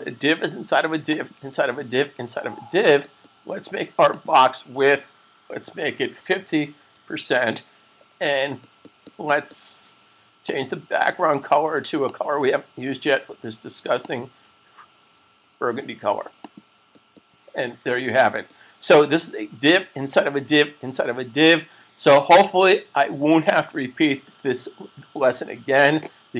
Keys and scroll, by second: 5.8-6.9 typing, 18.0 super+s.